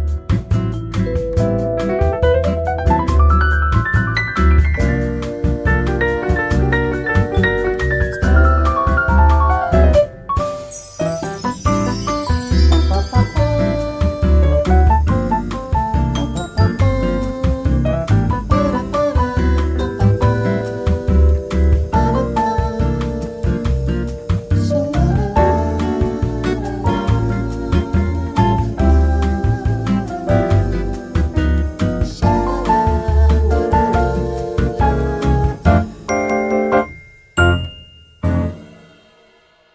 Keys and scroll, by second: 1.2 8, 1.3 F2, 3.4 Tab, 12.6 Tab, 23.2 ctrl+z, 23.3 ctrl+z, 24.7 ctrl+z, 27.0 ctrl+z, 32.4 Tab, 34.8-35.6 typing, 35.8 ctrl+z.